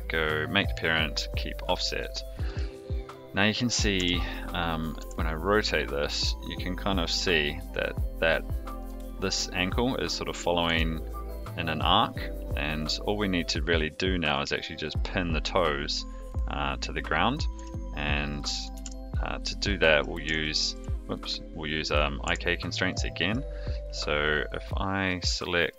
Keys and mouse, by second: 2.5 click, 3.9 Tab, 5.0 r, 10.6 r, 17.5 r, 18.7 alt+r, 19.6-20.0 middle drag, 20.4-20.7 shift+middle drag, 22.2 Tab, 22.9 middle click.